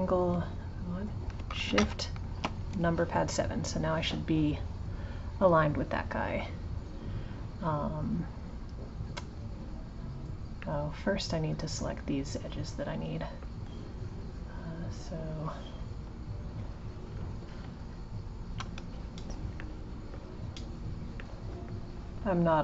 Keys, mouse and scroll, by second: 1.7 shift+KP_7, 10.6-13.6 middle drag, 15.3-16.8 drag, 17.8 shift+click, 19.6-22.3 middle drag, 22.3 click.